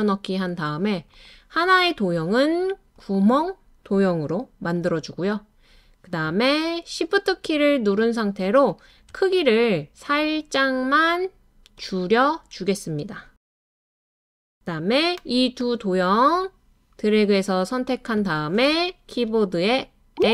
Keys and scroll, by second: 20.1 l, 20.2 l.